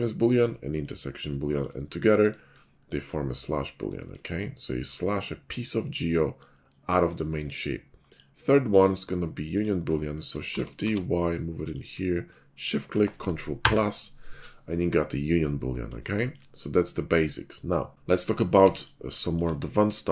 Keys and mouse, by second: 1.7 /, 1.9-4.1 middle drag, 8.0 middle click, 9.4 click, 10.3 shift+middle click, 10.4 shift+d, 12.5 shift+right click, 13.5 ctrl+KP_Add, 16.0-16.4 shift+middle drag, 17.9 a, 17.9 z, 18.4 x.